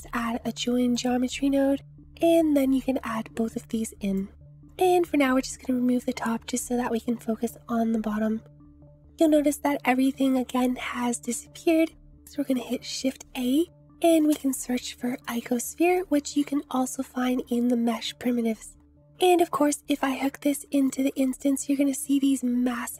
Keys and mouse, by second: 2.1-4.2 drag, 10.0 click, 10.2 middle click, 11.2 shift+middle click, 12.5 shift+a, 15.9 click, 16.3 shift+a, 19.1-20.9 drag.